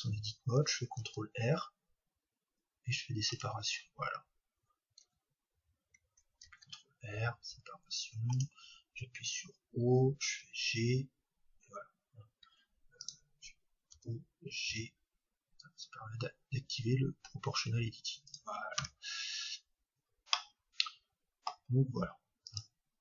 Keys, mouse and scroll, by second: 1.0 ctrl+r, 9.0-10.3 drag, 9.0 o, 10.3 g, 18.4-20.4 drag, 18.8 Tab, 20.4-23.0 middle drag.